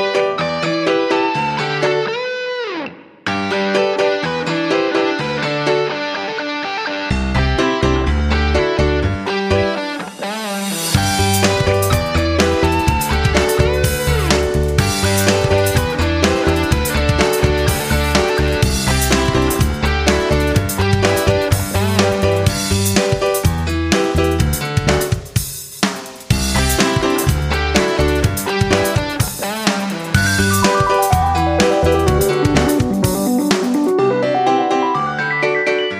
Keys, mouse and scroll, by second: 4.4 F9, 5.1 right click, 5.8 click, 17.7 F9, 18.2 click, 20.4 click, 21.7 click, 23.9 F9, 25.1-27.5 drag, 30.8 F9, 31.5 click.